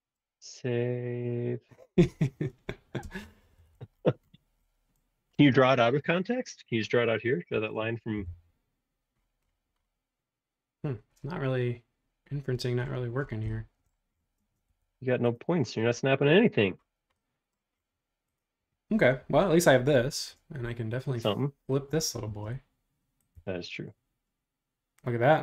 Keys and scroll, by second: 1.4 Escape, 1.9 super+s, 3.1 space, 3.2 Escape, 3.4 Escape, 3.6 Escape, 3.8 Escape, 8.1 l, 9.4 |, 14.4 space, 14.7 Escape.